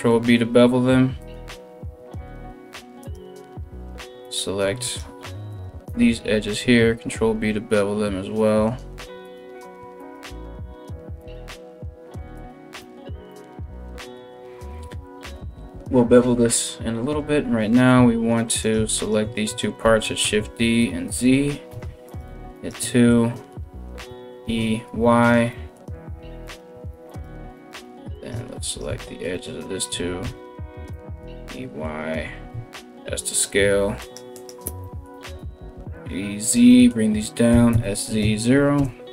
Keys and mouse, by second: 2.6 alt+right click, 2.8-3.8 alt+middle drag, 3.8 alt+shift+right click, 4.0 alt+shift+middle click, 4.5 alt+shift+right click, 4.7 alt+shift+middle click, 5.1 alt+shift+right click, 5.3-18.2 ctrl+alt+shift+middle drag, 6.2 ctrl+b, 8.8 right click, 9.6 alt+shift+right click, 10.8 alt+shift+right click, 12.0 alt+shift+right click, 17.6 3, 18.2 right click, 18.3 shift+middle click, 18.6 right click, 18.7-21.7 middle drag, 19.4 shift+d, 21.3 2, 21.7 right click, 21.8 shift+middle click, 22.2 shift+right click, 22.3-33.6 shift+middle drag, 23.7 e, 26.1 right click, 26.7 right click, 27.2 shift+right click, 27.7 right click, 28.3 shift+right click, 29.5 e, 32.1 s, 33.6 right click, 33.8 middle click, 34.0 right click, 34.1-39.1 middle drag, 34.7 e, 37.1 s.